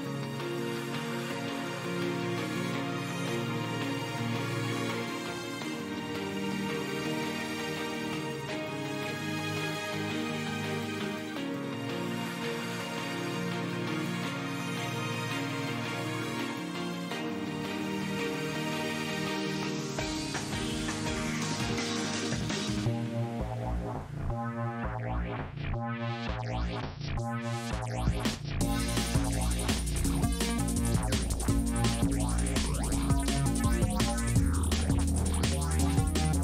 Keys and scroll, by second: 1.8 f, 7.4 s, 10.6 F4, 11.9 F4, 14.6 F4, 19.5 F4, 24.8 s, 25.7 s, 28.1 ctrl+z, 30.0 F4, 30.9 F4, 34.9 F4.